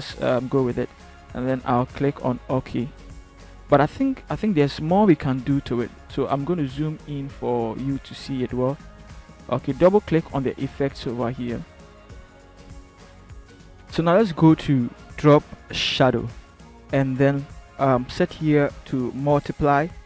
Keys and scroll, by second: 7.2 ctrl+=.